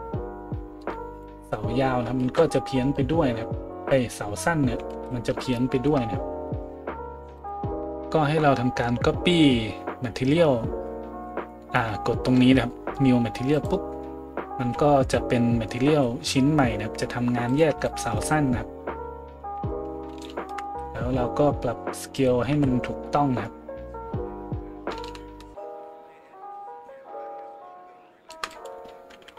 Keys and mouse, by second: 2.3 ctrl+z, 4.9 ctrl+z, 7.4 middle click, 7.4 right click, 17.5 middle click, 17.5 right click, 18.2 middle click, 18.2 right click, 22.2 middle click, 22.2 right click, 22.5 a.